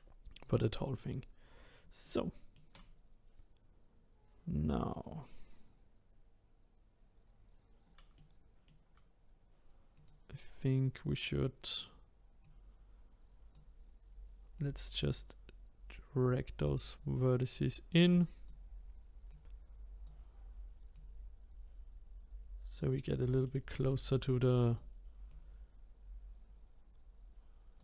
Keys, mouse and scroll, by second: 2.0-5.0 shift+middle drag, 8.2-9.9 middle drag, 9.9 click, 12.4 click, 14.5 click, 19.3 click, 20.9 click, 23.4 shift+middle click, 24.3 click, 25.3 click.